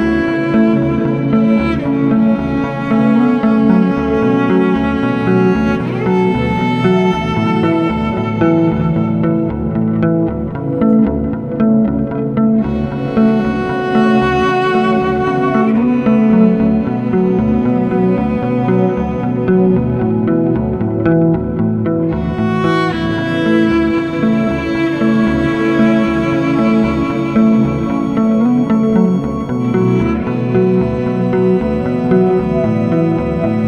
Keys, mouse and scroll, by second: 0.2 click, 3.8 click, 7.4 click, 9.2 click, 10.2 F4, 11.7 F9, 14.7 F9, 15.2 click, 17.3 ctrl+o, 17.7 click, 21.5 click, 23.0 click, 25.5 F4, 26.6 F9, 29.1 F9, 29.6 click, 30.6 ctrl+click, 31.8 double click, 33.1 click.